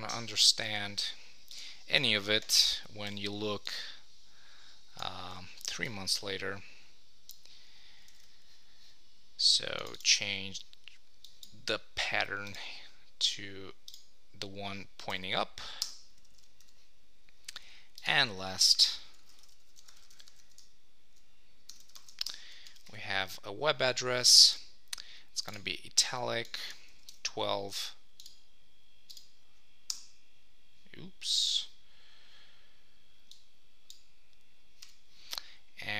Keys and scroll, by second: 8.1 super+s, 15.1 Return, 16.3 super+s, 22.2 super+Return, 27.1 Return, 29.9 Return.